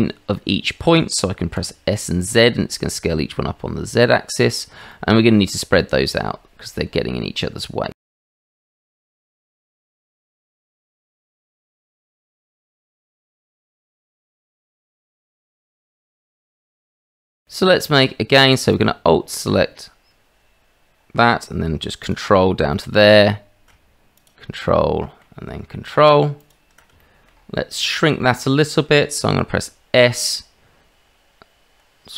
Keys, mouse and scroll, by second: 1.6 s, 4.9 click, 6.0 Tab, 7.9 click, 8.3 Tab, 9.0 g, 10.5 middle click, 10.9 middle click, 11.1 middle click, 12.1 middle click, 13.2 g, 13.8 middle click, 14.9 alt+shift+click, 15.2 g, 16.6 g, 17.0 click, 17.3 middle click, 22.7 middle click, 24.7 middle click, 26.4 ctrl+click, 27.0 shift+click, 27.7 middle click, 28.4 shift+middle click, 30.0 s.